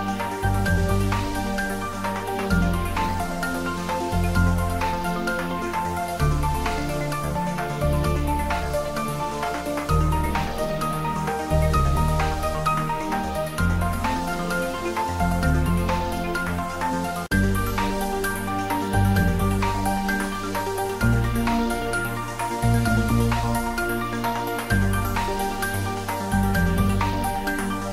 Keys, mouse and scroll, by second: 0.6 middle click, 2.2-2.5 ctrl+middle drag, 3.8-4.9 drag, 5.4 Tab, 6.6-7.0 middle click, 7.3 click, 8.2 Return, 9.0 click, 9.7 Return, 10.5-11.0 middle click, 11.8-14.8 drag, 16.9-19.7 drag, 23.7 ctrl+s, 25.3 click, 25.5 s, 26.3 ctrl+middle click, 26.5-26.9 shift+middle click, 26.9-27.3 ctrl+middle click, 27.7 ctrl+s.